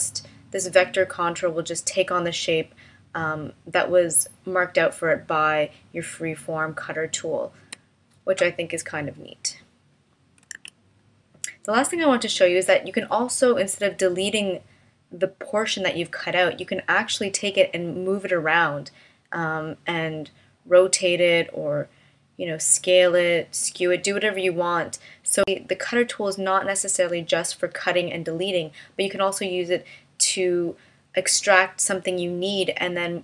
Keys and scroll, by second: 10.5 super+z.